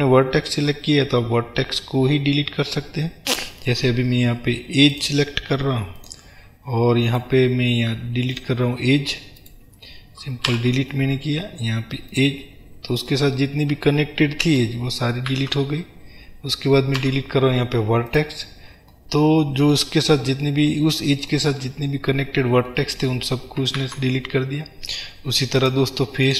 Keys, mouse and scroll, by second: 5.0 click, 6.0 click, 7.0-8.4 right drag, 8.4 click, 9.5 click, 10.6 Delete, 13.2-25.8 middle drag, 15.4 ctrl+z, 20.1-20.6 scroll down 2, 20.6 scroll down 1, 21.6-22.6 scroll up 2, 23.8 ctrl+z, 25.8 click.